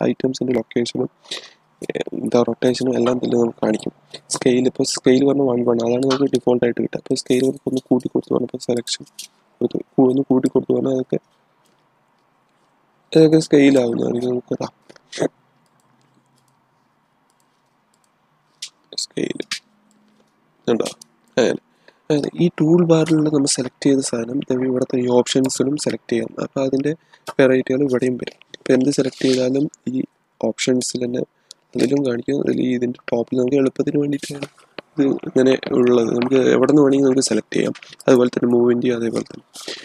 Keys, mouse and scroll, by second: 6.2-8.8 middle drag, 8.8-13.7 drag, 13.7-15.6 drag, 19.8-23.2 drag, 25.2 click, 37.9 click.